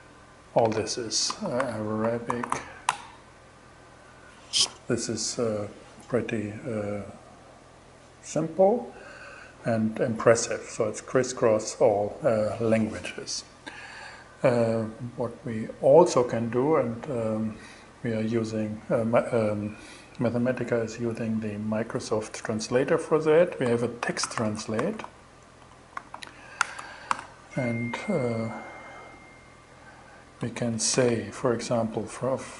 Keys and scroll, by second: 0.7-2.4 typing, 22.9-26.1 typing, 26.5 alt+5.